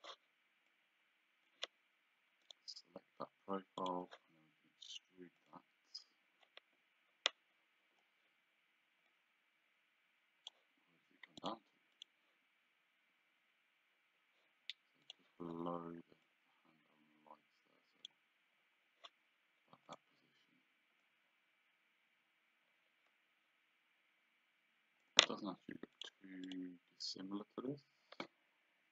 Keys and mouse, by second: 0.7 click, 2.5 right click, 3.9 click, 5.4 click, 9.1 click, 11.5 click, 15.1 click, 16.3 click, 19.9 click, 21.1 click, 26.0 click.